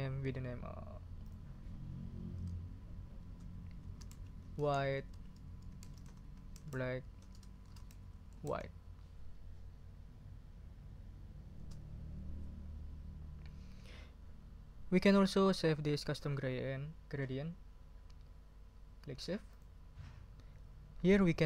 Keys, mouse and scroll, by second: 1.2 click, 2.4 BackSpace, 3.6-8.9 typing, 11.5 Return, 19.5 click.